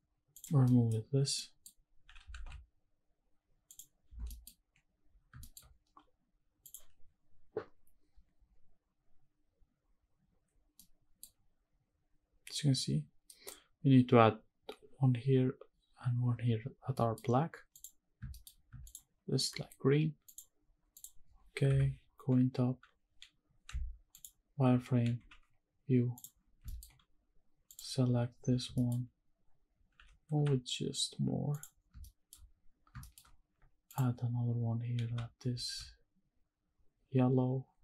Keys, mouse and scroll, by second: 0.7 middle drag, 0.9-1.4 scroll down 2, 1.4 middle click, 2.0 g, 2.3 shift+z, 3.7 click, 4.3 middle drag, 4.6-5.2 scroll up 3, 5.4 shift+middle click, 7.0 click, 10.8-11.2 middle drag, 11.4 scroll down 1, 13.2 middle click, 16.9 middle drag, 17.2-17.6 scroll down 2, 17.7 click, 18.1 scroll down 1, 18.3 shift+middle click, 18.9 shift+click, 20.4 click, 20.9 click, 21.7 KP_7, 23.0-23.7 scroll up 2, 23.7 z, 25.2 g, 26.2 click, 26.4-27.7 scroll up 5, 26.7 shift+middle drag, 27.7 click, 27.7 scroll up 1, 28.1-28.7 scroll down 3, 28.7 shift+middle drag, 28.9-30.3 scroll up 5, 29.9 g, 30.3 x, 31.5 click, 31.8 scroll down 2, 32.0 shift+middle click, 32.8 scroll down 2, 33.0 shift+middle click, 33.9 click, 34.2-35.0 scroll up 1, 35.0 g, 35.6 shift+z.